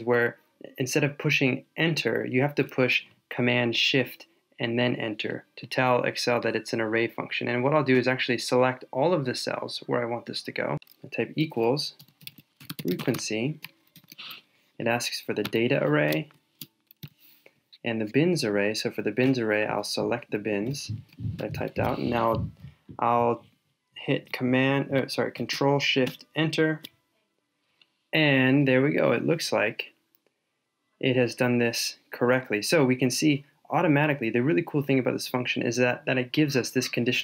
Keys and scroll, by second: 16.2 shift+super+Down, 26.0 ctrl+shift+Return.